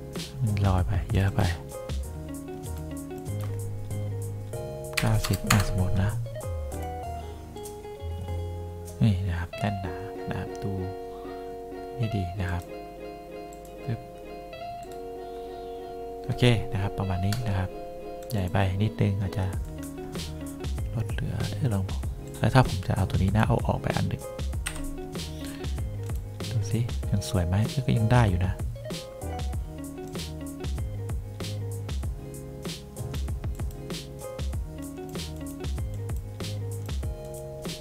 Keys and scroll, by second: 5.1 9, 5.3 0, 5.6 Return, 24.7 Delete.